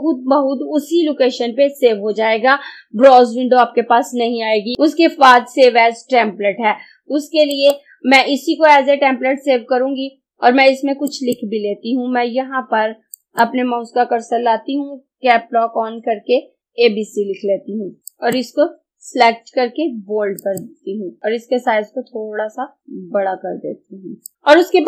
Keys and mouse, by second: 7.5 click, 11.1 click, 16.4-17.1 typing, 18.2 click, 22.8-24.3 drag.